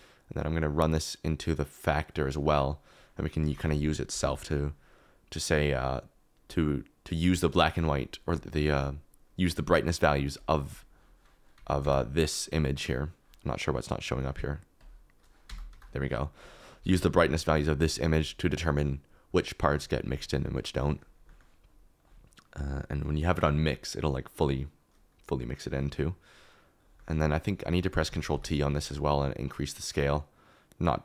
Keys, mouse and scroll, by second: 3.5 shift+a, 11.5 Tab, 11.8 Tab, 15.5 Tab, 15.7 Tab, 22.3-23.4 drag, 24.2-25.3 drag, 28.0 ctrl+t, 28.3 g, 29.5 click.